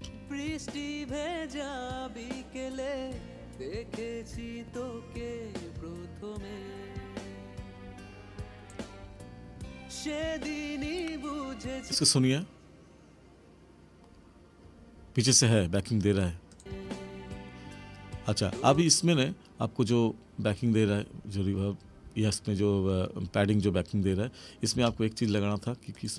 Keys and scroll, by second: 0.0 space, 24.7 space.